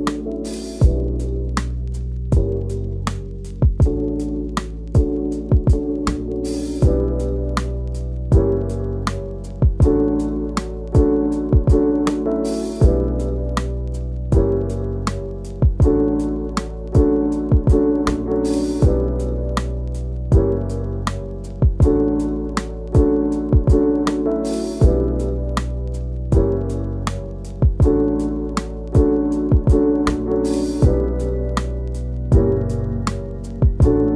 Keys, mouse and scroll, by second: 0.6 middle click, 1.4 click, 1.6 scroll up 1, 2.5 middle click, 2.7 f, 3.0 click, 3.6 click, 4.4-4.9 scroll down 11, 4.7 middle click, 4.9 shift+middle click, 5.8 scroll down 1, 5.9 middle click, 6.4-6.9 scroll up 2, 6.9 scroll down 1, 7.0 middle click, 7.2 middle click, 7.5-7.8 scroll up 4, 7.8-9.9 middle drag, 9.9 click, 10.0 shift+middle click, 10.1 scroll up 2, 10.3 scroll down 1, 10.4 middle click, 11.3-11.8 scroll up 2, 11.5 shift+middle click, 11.8 1, 12.0 middle click, 12.4 scroll up 1, 12.6 middle click, 13.7 Left, 14.1 Left, 14.5 scroll down 1, 14.6 middle drag, 14.7 scroll up 2, 14.9 2, 15.1 alt+Left, 15.6 shift+middle click, 15.7 scroll up 1, 16.2 f, 17.7 right drag, 17.9 a, 18.3 shift+n, 18.4-19.2 scroll down 1, 19.2 KP_Decimal, 20.0 scroll down 2, 20.1 middle click, 20.5-21.0 scroll up 2, 20.6 Tab, 20.8 click, 21.0 middle click, 21.3 click, 22.4-24.8 drag, 25.7 h, 25.9 scroll down 1, 26.0-26.5 middle drag, 26.5 click, 26.5 scroll down 1, 28.1 scroll up 1, 28.9 scroll down 1, 29.4 middle click, 29.6 shift+middle click, 29.7 scroll up 1, 29.8 middle click, 30.2 scroll down 3, 30.4 middle click, 31.2 middle click, 31.4 scroll up 2, 31.5 shift+middle click, 32.1 scroll down 2, 32.6 shift+middle click, 32.7 scroll up 3, 33.1 scroll down 1, 33.2 middle click, 33.3 middle click, 33.6-34.1 scroll up 2, 33.9 shift+middle click.